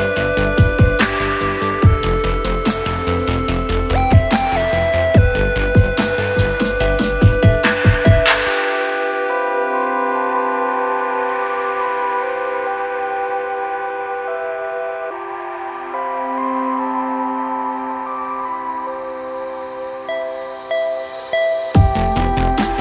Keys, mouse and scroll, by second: 0.0 alt+middle click, 0.3 alt+click, 1.2-2.3 scroll up 5, 1.9 alt+middle click, 2.4 alt+click, 3.1 alt+middle click, 3.4 scroll up 1, 3.7 middle click, 4.4 click, 6.7 alt+middle click, 7.2 click, 9.6-10.7 drag, 12.7 ctrl+g, 13.6 click, 14.0 click, 14.1 double click, 14.8-15.8 typing, 16.4 click, 17.1 right click, 18.1 click, 18.9-19.4 scroll down 2, 19.5 alt+middle click, 20.3 click, 21.1 click, 21.4 scroll down 2, 21.7 alt+middle click, 22.0 scroll down 2, 22.6 click.